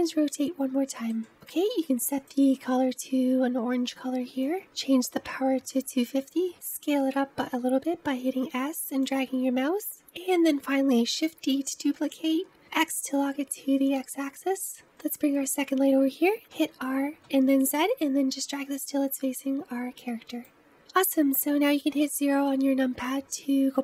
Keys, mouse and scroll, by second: 0.2-2.2 middle drag, 2.2 click, 5.7 click, 6.4 s, 11.7 shift+d, 16.5 r, 20.7 click, 21.9 KP_0.